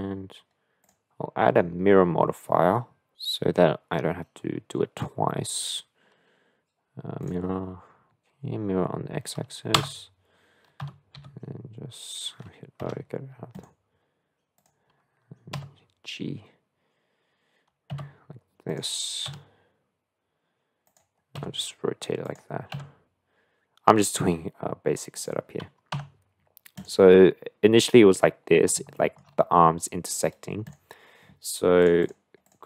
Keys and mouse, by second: 0.8-9.8 drag, 9.8 Tab, 10.8 a, 11.2 g, 14.6 click, 15.6 g, 19.3 s, 21.4 r, 22.7 g, 26.0 Tab, 26.8 drag, 27.1-28.7 middle drag, 29.0 shift+middle click, 30.6-32.2 drag, 32.4-32.6 drag.